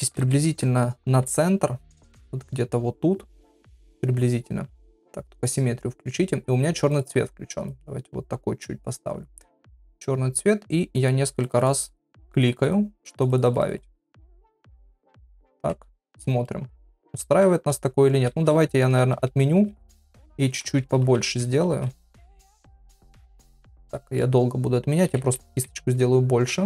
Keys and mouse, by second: 0.0-1.2 ], 1.4 ], 2.0 [, 5.4 click, 6.9 click, 11.0 click, 11.3 click, 13.0 click, 13.8 click, 15.2 click, 16.0 middle click, 18.3 ctrl+z, 18.5 ctrl+z, 18.7 ctrl+z, 19.3 ctrl+z, 19.6 ctrl+z, 19.8-21.0 ctrl+z, 21.2 ctrl+z, 22.0 ctrl+z, 22.4 KP_1, 23.3 shift+middle click, 24.0 shift+middle click, 25.1 ], 25.2-26.1 ].